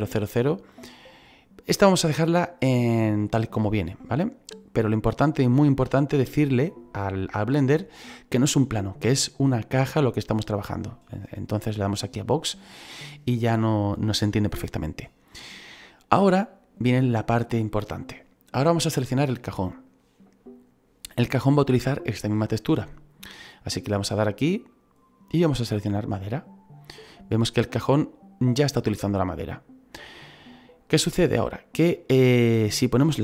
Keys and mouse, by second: 19.1 right click, 24.6 click, 26.0 click.